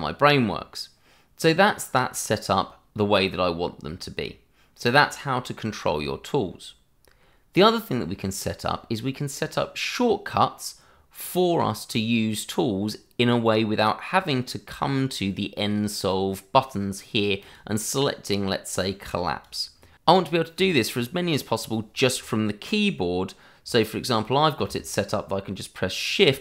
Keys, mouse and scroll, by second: 17.4 click, 25.0 shift+click, 25.1 click.